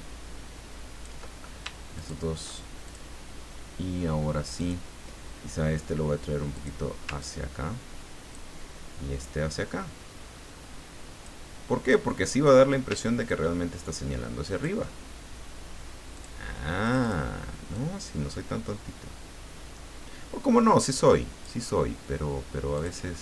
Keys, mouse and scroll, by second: 1.9 shift+click, 2.9 shift+click, 4.6 click, 6.5 click, 7.2-8.5 ctrl+drag, 9.2-11.7 ctrl+drag, 11.9 ctrl+click, 13.3-15.2 ctrl+drag, 16.2 click, 16.8 click, 17.7-22.0 drag, 22.7 click.